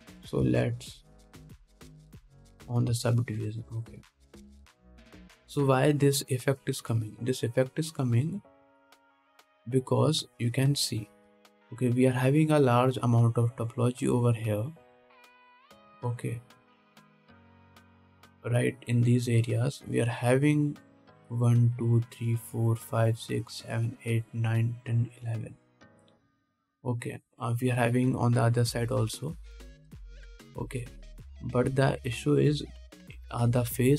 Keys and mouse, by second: 0.2 alt+a, 1.8 ctrl+Tab, 3.5 middle click, 3.6-9.9 drag, 9.9-15.3 middle drag, 15.3-17.4 drag, 17.4-29.5 middle drag, 18.7 ctrl+z, 28.4 click, 28.4 right click, 28.8 click, 28.8 right click, 29.3 click, 29.3 right click.